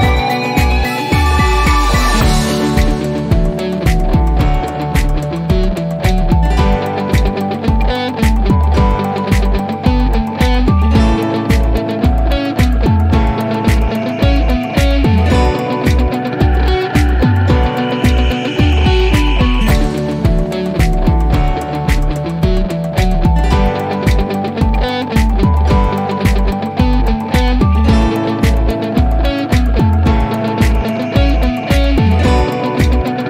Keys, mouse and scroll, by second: 3.6 click, 7.5 click, 11.0-11.6 drag, 12.5 typing, 15.0-15.8 typing, 17.4 click, 19.8 click.